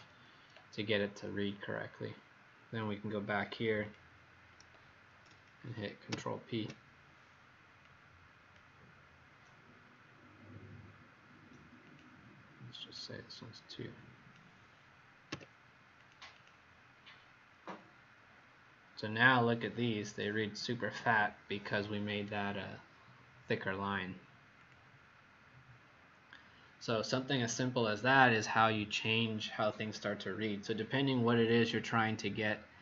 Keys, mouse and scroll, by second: 6.0 ctrl+p, 7.8 click, 15.2 2, 15.9 click, 16.3 click, 24.5 click, 25.7-26.4 scroll up 5, 27.4-31.8 scroll down 1.